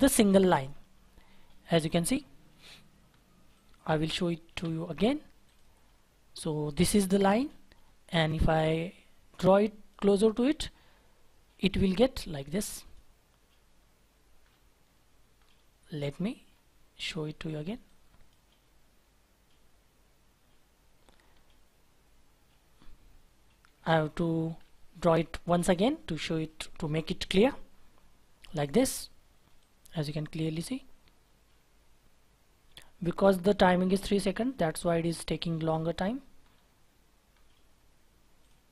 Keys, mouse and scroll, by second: 0.6 scroll down 1, 4.5 Delete, 5.8-6.4 scroll up 1, 6.4-7.0 scroll down 1, 7.7 scroll up 1, 14.4-14.8 scroll down 1, 14.8-15.3 scroll up 1, 15.3-15.8 scroll down 1, 15.8-16.5 scroll up 1, 16.5-16.9 scroll down 1, 16.9-17.9 scroll up 1, 20.9-23.8 scroll down 1, 28.7-29.1 scroll up 1, 34.8-35.8 scroll down 1, 35.8-36.3 scroll up 1, 36.3-38.5 scroll down 1.